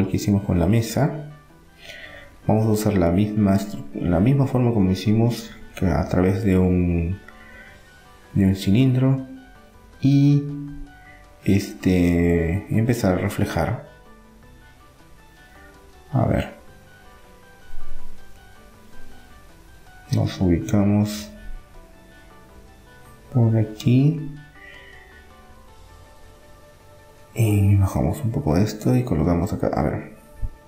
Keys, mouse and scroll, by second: 7.5 middle click, 9.8 middle click, 10.2 Tab, 12.4-14.7 middle drag, 15.2 Tab, 15.7-17.8 middle drag, 20.0 middle click, 20.9 KP_7, 21.4-22.4 middle drag, 24.5-26.4 middle drag, 26.1 s, 27.8-30.2 drag, 30.2-30.6 middle drag.